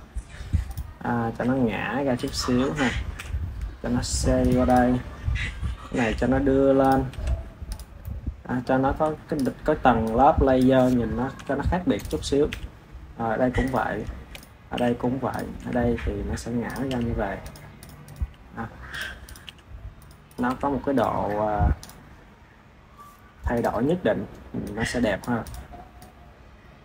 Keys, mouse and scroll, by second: 0.6 click, 1.3 r, 3.0 KP_7, 3.8 r, 4.5 click, 5.8 g, 7.0 KP_1, 7.6 click, 7.9-9.2 middle drag, 9.2 click, 9.9 click, 11.2 KP_7, 11.9 click, 12.4 g, 14.2 click, 14.6 g, 15.5 r, 16.8 g, 17.7 drag, 18.0 click, 18.1 g, 19.2 click, 19.3 g, 20.2 click, 20.4 KP_1, 20.9 click, 21.1-21.7 scroll down 5, 21.7 click, 22.0 scroll up 5, 23.5 click, 24.5 click, 25.3 click, 25.9 click.